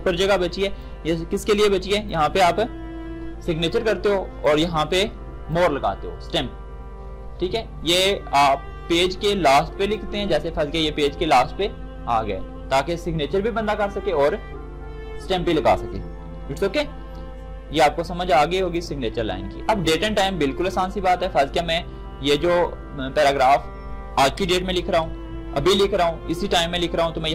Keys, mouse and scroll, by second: 0.1 ctrl+shift+d, 18.7 shift+click, 21.4-24.4 shift+drag, 24.4 shift+Return, 24.8 shift+Up.